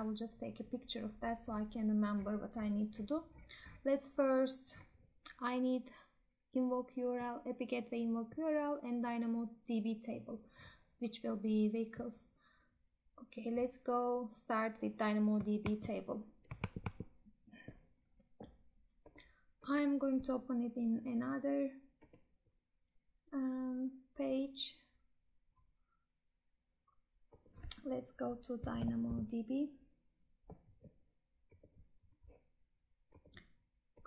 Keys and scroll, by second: 15.7 Tab, 16.6 alt+Tab.